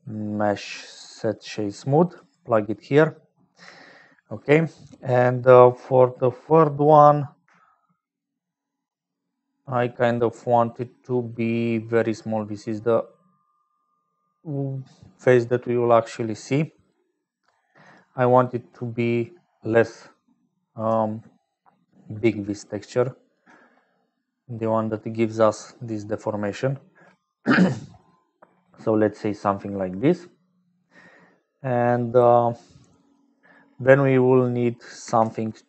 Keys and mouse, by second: 0.0-35.6 typing, 3.1 click, 3.8 shift+click, 4.8 click, 6.8 click, 8.3-16.1 shift+drag, 16.6-18.1 shift+drag, 18.2 click, 21.6-23.5 shift+drag, 23.9 click, 25.3 click, 27.5 click, 32.8 click, 34.0 click.